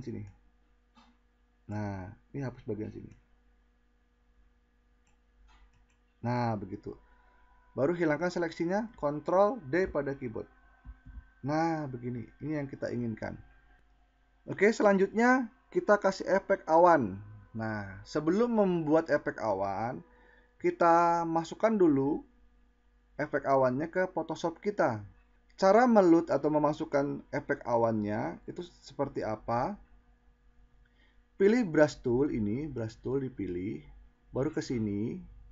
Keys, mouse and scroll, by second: 8.1 ctrl+d.